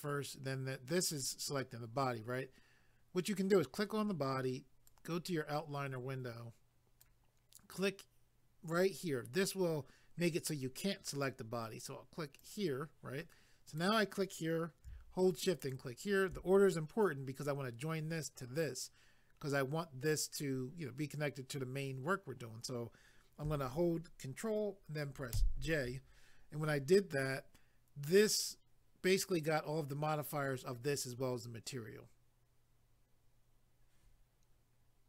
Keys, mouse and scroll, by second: 1.1 click, 1.2 click, 4.9 click, 12.4 click, 12.5 click, 13.7 click, 13.8 click, 15.6 shift+click, 25.4 ctrl+j.